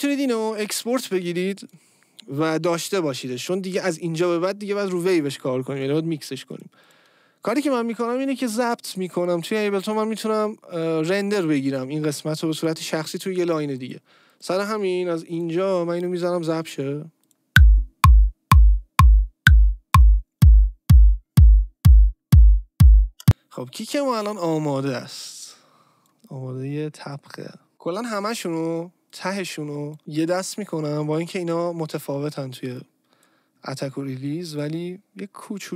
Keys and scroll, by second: 23.2 space.